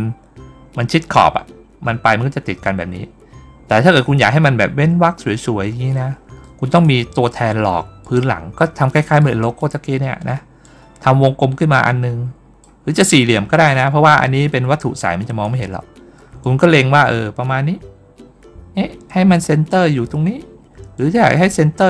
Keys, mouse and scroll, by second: 3.4-4.0 scroll down 1, 6.3 middle click, 7.9 click, 9.0 middle click, 10.5-12.5 drag, 13.0 middle click, 13.0-13.5 scroll down 1, 13.5-13.9 scroll up 2, 14.1 ctrl+scroll down 2, 14.3 ctrl+middle click, 14.8 middle click, 15.7 ctrl+scroll up 1, 16.3-19.3 drag, 20.8-21.8 drag.